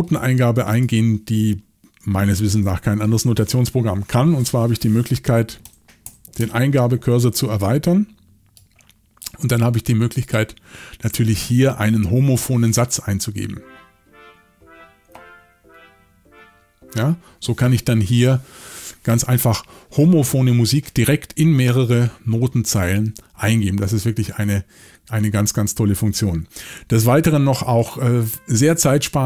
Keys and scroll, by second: 2.0 x, 5.6 shift+Down, 6.0 shift+Down, 6.4 shift+Down, 26.3 Escape, 28.8 y.